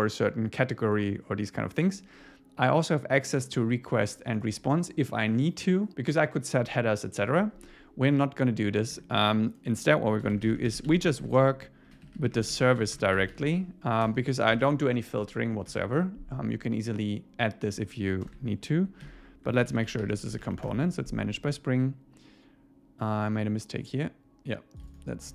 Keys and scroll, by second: 15.7 Tab, 18.3 Return, 19.1 alt+l, 20.7 Return.